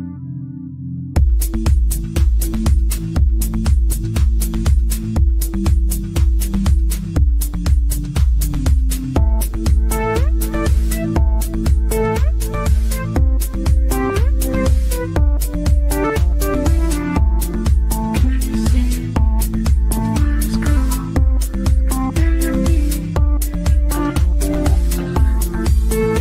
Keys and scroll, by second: 3.9 ctrl+z, 11.7 ctrl+z, 19.3 Delete, 21.2 ctrl+shift+a, 23.4 g.